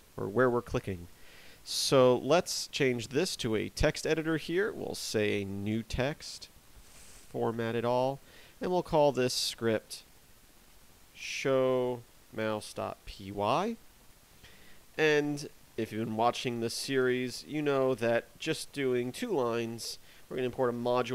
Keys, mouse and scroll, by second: 1.0 click, 2.0 click, 4.4 click, 6.5 click, 6.9 click, 7.4 click, 9.1 click, 16.8-17.5 typing, 19.6 shift+r.